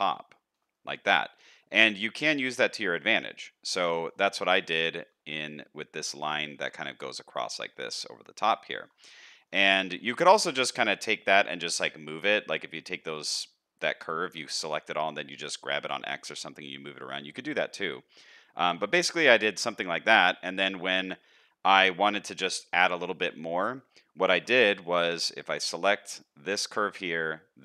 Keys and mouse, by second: 0.1 shift+middle click, 0.7-2.2 middle drag, 2.4 shift+middle click, 3.8 middle click, 4.6 shift+middle click, 4.6 shift+click, 4.8 shift+middle click, 6.4 shift+middle click, 7.6 middle click, 8.6 shift+middle click, 9.1 middle click, 9.6 shift+middle click, 10.8 middle click, 16.1 middle click, 16.6 shift+middle click, 17.7 middle click, 18.5 shift+middle click, 19.5 shift+middle click, 22.4 middle click, 22.9 shift+middle click.